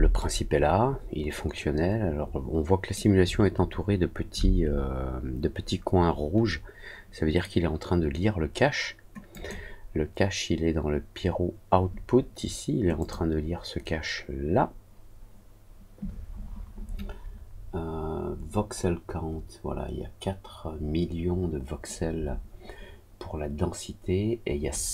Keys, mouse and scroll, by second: 0.1-2.9 alt+middle drag, 9.3 click, 12.9 click.